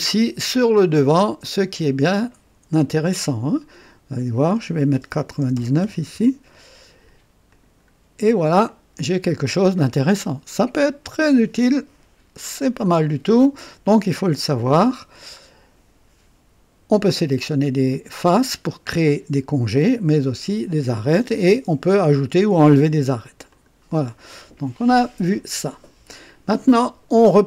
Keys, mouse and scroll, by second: 1.2-2.2 drag, 4.0 click, 5.3 BackSpace, 5.8 KP_9, 7.4 click, 8.6-13.1 drag, 23.4 click.